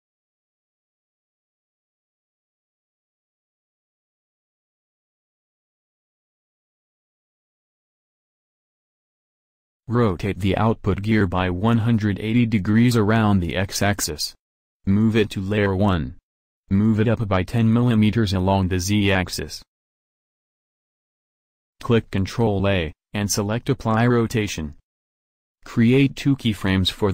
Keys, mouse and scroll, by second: 0.9 alt+f, 2.9 KP_1, 3.4 a, 4.1 b, 4.3 click, 5.7 middle click, 7.4 alt+f, 7.9 a, 8.0 a, 8.5 ctrl+n, 9.4 Tab, 11.8 r, 13.6 m, 15.8-16.3 drag, 17.3 g, 19.1 Return, 21.8 ctrl+a, 25.2 i, 26.8-27.1 drag.